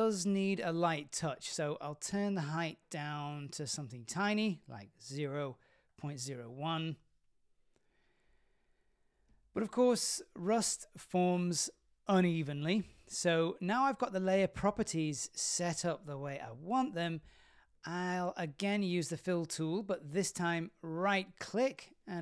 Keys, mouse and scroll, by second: 1.9-7.0 drag, 7.7-8.1 scroll up 3, 8.1-8.6 middle drag, 9.5-10.8 drag, 11.7-12.9 scroll down 3, 12.3-14.0 middle drag, 14.5-16.0 scroll down 1, 16.0 scroll down 1, 20.0 click, 21.8-22.2 right drag.